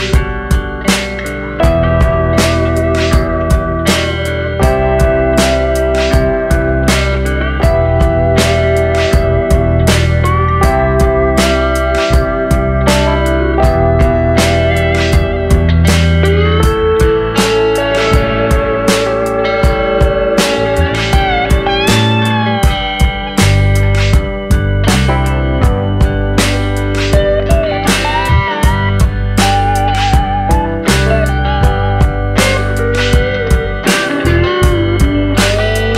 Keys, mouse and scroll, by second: 1.2 middle click, 2.3 Tab, 2.5 scroll up 2, 6.6 click, 7.3 alt+click, 8.1 click, 8.7 alt+click, 9.2 f, 9.7 middle click, 9.9 Tab, 10.4 middle click, 10.9 click, 11.3-11.8 scroll down 2, 11.4 middle click, 11.8 click, 12.0 middle click, 12.2 click, 12.4 click, 12.9 middle click, 13.3 middle click, 17.3 middle click, 27.9 middle click, 30.9 middle click, 31.2-31.6 scroll up 3, 31.6 shift+middle click, 32.5 click, 33.3 click, 33.8 Tab, 34.1 middle click.